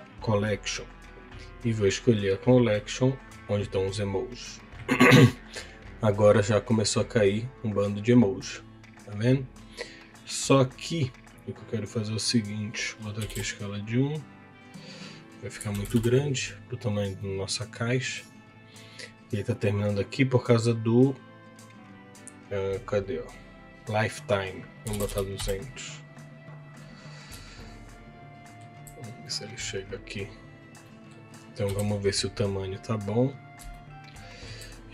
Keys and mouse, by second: 1.4-3.4 drag, 5.2 middle click, 12.3 click, 14.9-16.0 drag, 17.2 middle click, 23.8-25.6 drag, 25.0 KP_0, 27.5-28.6 shift+middle drag, 29.2 middle click, 30.8 middle click, 33.7 shift+middle click, 33.7 shift+KP_1.